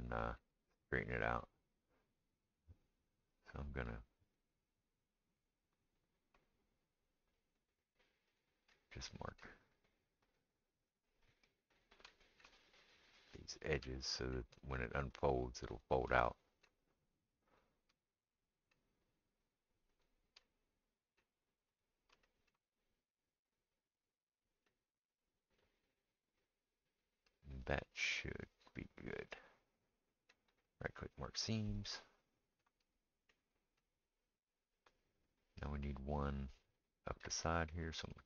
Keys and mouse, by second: 3.4-4.4 shift+drag, 3.4-4.4 shift+middle drag, 8.4 shift+click, 10.3 shift+click, 10.3 shift+middle click, 11.8 shift+click, 11.8 shift+middle click, 13.5 shift+click, 13.5 shift+middle click, 15.2 shift+click, 15.2 shift+middle click, 15.7 shift+click, 15.7 shift+middle click, 15.9-17.7 shift+middle drag, 17.5 shift+click, 17.5 shift+right click, 17.7-20.4 shift+right drag, 19.5 shift+click, 20.0 shift+click, 20.0 shift+middle click, 20.4 middle click, 20.8-38.2 right drag, 21.8 shift+click, 21.8 shift+middle click, 23.5 shift+click, 24.1 shift+click, 24.2-26.3 shift+middle drag, 32.1 middle click.